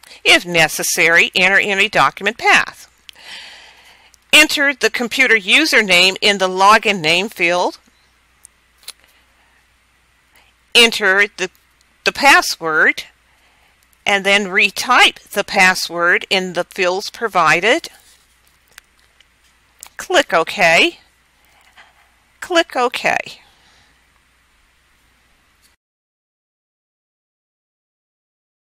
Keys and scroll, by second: 3.6-5.3 typing, 6.3-8.0 typing, 12.2 1, 13.5 1, 17.3 1, 18.5 1.